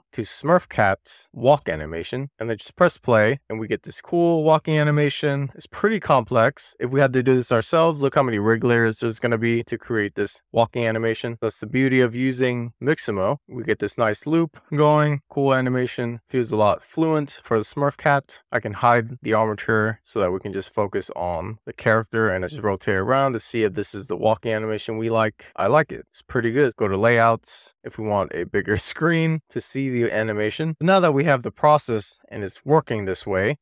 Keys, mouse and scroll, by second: 2.4 click, 9.0 middle click, 9.8 drag, 10.6-12.1 middle drag, 14.5-15.0 scroll down 1, 15.6-16.9 middle drag, 18.4 click, 18.6-19.1 middle drag, 19.6 middle click, 20.7-21.9 drag, 22.2 middle drag, 22.6-25.0 middle drag, 25.2-26.3 middle drag, 26.6 click, 27.4-29.5 scroll down 1, 29.5-30.5 scroll down 2, 31.7 click, 32.4-33.4 middle drag.